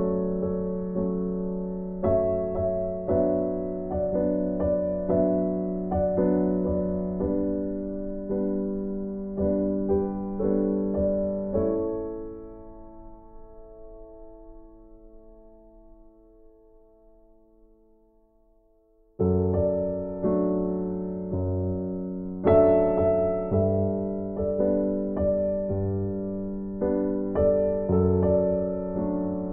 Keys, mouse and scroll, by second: 0.9 click, 2.8 right click, 3.9 click, 13.0 right click, 14.7 click, 17.8 right click, 20.0 click, 25.9 right click.